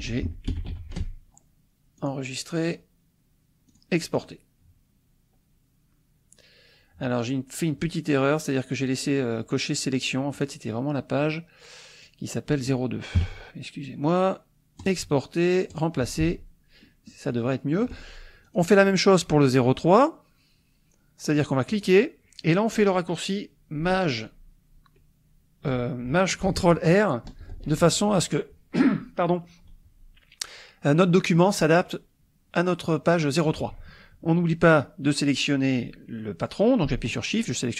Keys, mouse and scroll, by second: 0.0-1.2 typing, 2.0 click, 3.7 click, 4.1 click, 10.4 click, 12.0 click, 13.2 KP_2, 14.8 click, 15.7 click, 17.3 click, 18.4 click, 21.7 click, 27.2 ctrl+shift+r, 37.3 shift+click.